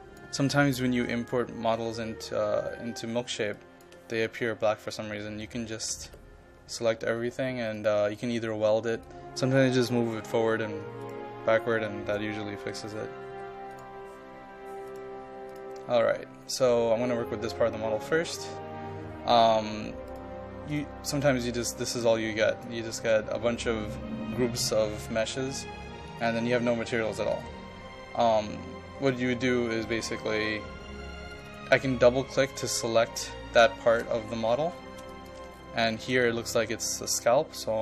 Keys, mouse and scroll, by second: 0.9 click, 2.0 click, 2.7-3.1 scroll down 1, 3.1-3.4 scroll up 1, 3.5 ctrl+click, 5.9 ctrl+a, 7.8 click, 10.6 KP_1, 11.0-13.0 drag, 13.3 KP_1, 13.7-23.0 drag, 32.8 ctrl+click, 33.5-34.6 scroll up 2, 34.7 shift+scroll up 1, 35.1 ctrl+click, 35.5 shift+scroll up 1.